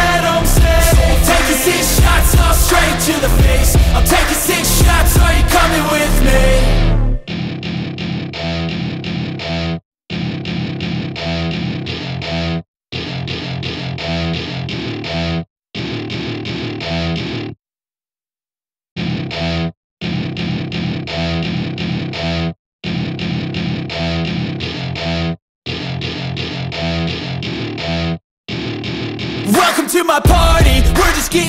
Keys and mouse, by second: 1.8 Escape, 5.2 r, 8.8 Escape, 10.3 g, 14.0 Escape, 15.4 s, 18.1 Escape, 19.6 click, 21.3 r, 23.4 Escape, 24.4 g, 26.6 Escape, 27.6 s, 29.8 Escape, 30.7 click.